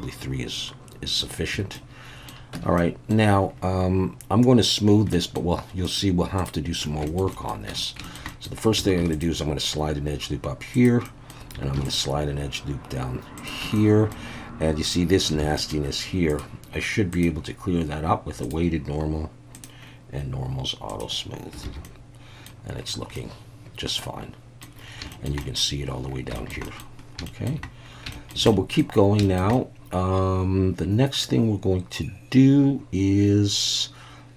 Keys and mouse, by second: 1.2 shift+click, 1.7 middle click, 2.5 Tab, 2.8-3.1 middle drag, 5.1 middle click, 5.9-6.4 right drag, 7.1 shift+middle click, 7.3 middle click, 7.7 Tab, 8.0 shift+middle click, 8.3 middle click, 9.0 ctrl+r, 10.7 click, 11.0 middle click, 11.7 ctrl+r, 13.4 click, 13.6 Tab, 13.8-14.1 middle drag, 15.4 alt+a, 15.6 middle click, 16.3 click, 17.2-18.5 drag, 19.6 click, 20.9 click, 21.7 alt+a, 21.8-22.5 middle drag, 23.2-24.6 middle drag, 25.1 shift+middle drag, 25.4 middle drag, 26.3 shift+middle drag, 26.6 middle drag, 27.3 shift+middle drag, 28.1 shift+middle drag, 28.5 middle drag, 29.2 shift+middle click, 29.6-34.3 middle drag.